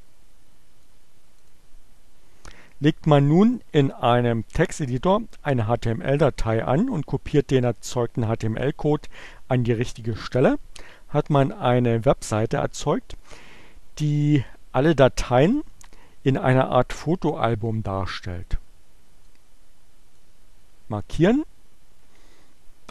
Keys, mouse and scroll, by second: 1.4 click, 18.8-20.1 drag, 20.9 right click.